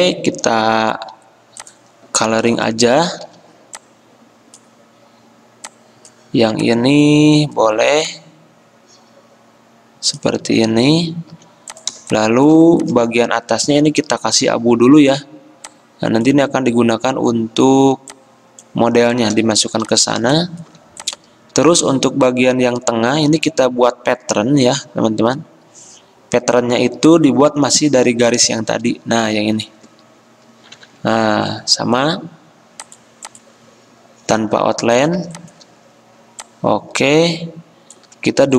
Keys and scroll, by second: 1.1 i, 3.4 g, 11.5 v, 14.4 F6, 14.8 typing, 19.9 v, 30.9 d.